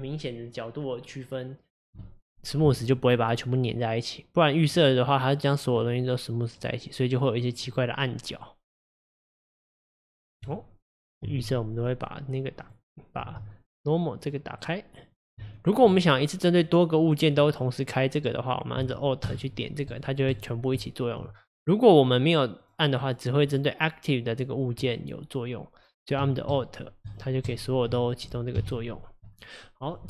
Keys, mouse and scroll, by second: 3.4-4.8 middle drag, 4.8 scroll up 1, 5.4 click, 5.8-8.9 middle drag, 9.1 click, 9.7-10.5 middle drag, 10.5 click, 11.2 x, 12.7 click, 14.3 click, 15.1 click, 15.5 shift+click, 16.2 drag, 17.0 click, 19.2 alt+click, 19.9 alt+click, 20.3 alt+click, 20.7 alt+click, 22.6 click, 23.1 click, 23.5 click, 24.3 click, 24.8 click, 26.5 alt+click, 27.0 alt+click, 27.4 alt+click, 28.5 KP_1, 29.3 click.